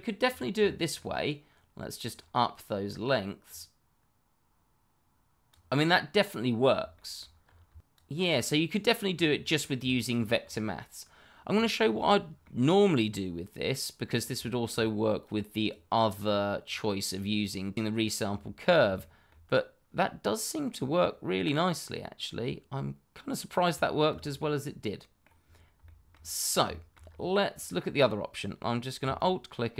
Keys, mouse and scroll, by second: 0.2-0.5 scroll down 1, 0.6 shift+middle click, 3.4 click, 5.8 middle click, 6.9 shift+middle click, 7.0 middle click, 7.4-7.8 scroll up 1, 7.8 shift+middle click, 8.0 scroll up 1, 8.1 middle click, 8.8 click, 10.0 scroll down 1, 10.7 shift+middle click, 10.9-11.4 scroll up 1, 11.4-11.9 scroll down 1, 12.0 shift+middle click, 12.1 middle click, 12.8 shift+middle click, 14.1 scroll down 1, 14.4 shift+middle click, 15.2 click, 18.2-18.8 scroll up 1, 18.9 shift+middle click, 19.0 middle click, 19.1 shift+middle click, 20.7-21.0 scroll down 1, 21.0 middle click, 23.8 shift+middle click, 23.9 middle click, 24.0 shift+middle click, 24.2 scroll up 1, 24.8 middle click, 25.4-25.8 scroll down 1, 25.8 shift+middle click, 26.4 scroll down 1, 26.7 shift+middle click, 27.0 scroll up 1, 29.1 alt+click, 29.2 click, 29.3 alt+click.